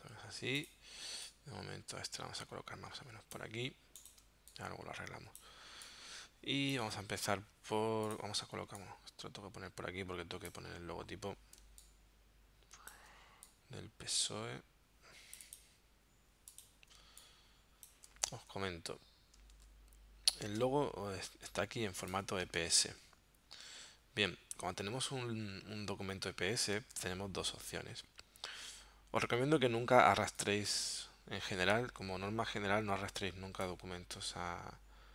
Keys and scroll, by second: 4.2 space, 11.7 space, 17.0 space, 19.6 super+Tab, 22.4 space, 26.8 space.